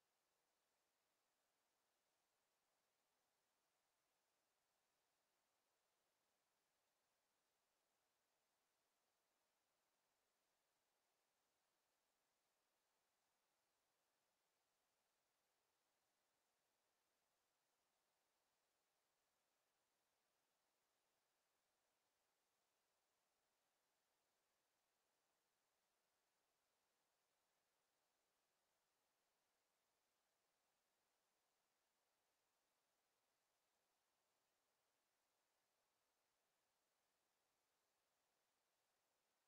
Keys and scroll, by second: 18.0 ctrl+z.